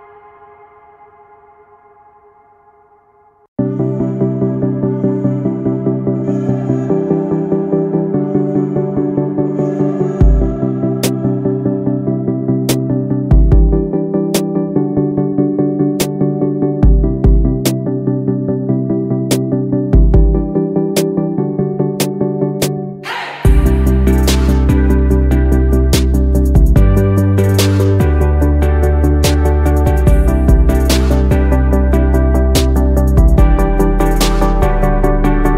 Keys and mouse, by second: 1.7 click, 9.7 drag, 14.5 click, 26.2 click, 26.8 click, 28.0-35.5 drag.